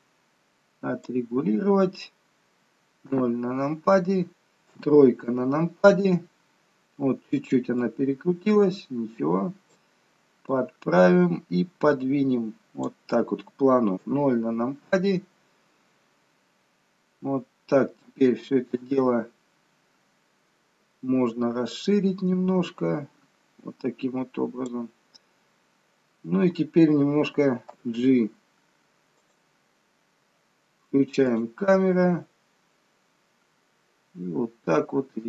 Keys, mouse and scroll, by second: 3.3 KP_0, 4.9 KP_3, 6.4-7.1 scroll down 1, 7.9-8.5 scroll down 1, 10.7 click, 14.1 KP_0, 16.6-17.2 scroll down 2, 17.2-17.6 scroll down 2, 17.6-18.6 scroll up 2, 18.6 scroll down 1, 21.9 click, 28.2 g, 31.5 click, 32.2 g.